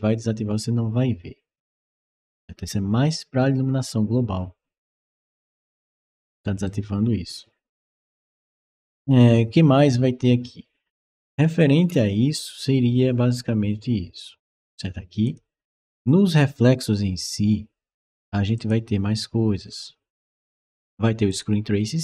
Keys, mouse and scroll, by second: 5.3-6.5 right drag, 11.7 middle click, 15.1 click, 18.4 click, 21.1 click.